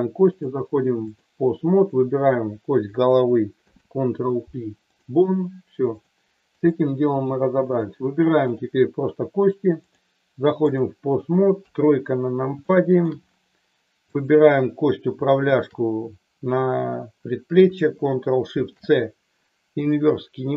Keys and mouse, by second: 0.3-1.3 drag, 1.7 click, 3.5 ctrl+p, 5.9 click, 7.7 click, 8.4 click, 9.9 click, 11.5 KP_3, 12.5 shift+middle click, 15.5 shift+click, 18.4 ctrl+shift+c.